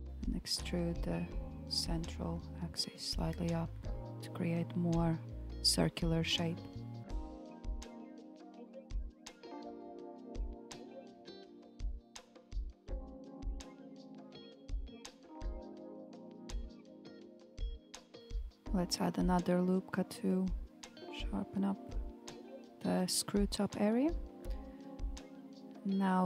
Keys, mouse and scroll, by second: 0.1 click, 0.7 middle click, 1.4 click, 2.0 shift+click, 2.4 shift+click, 3.5 g, 6.9 scroll down 1, 7.2-10.0 middle drag, 10.0 KP_1, 11.4-14.6 scroll up 2, 16.2-17.0 scroll up 1, 17.0 click, 18.2 alt+z, 18.2-18.8 scroll down 4, 18.8-20.8 shift+middle drag, 20.8 ctrl+r, 24.8 alt+z, 25.1 click.